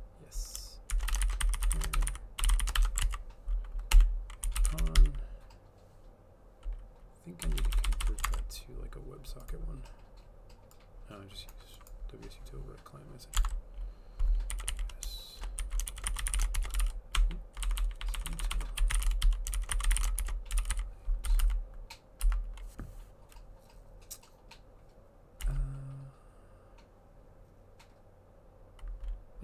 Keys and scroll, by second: 0.7-5.5 typing, 3.1 ctrl+s, 7.2-9.0 typing, 13.4 alt+Tab, 14.3-21.4 typing, 25.5 Up, 25.9-26.6 typing.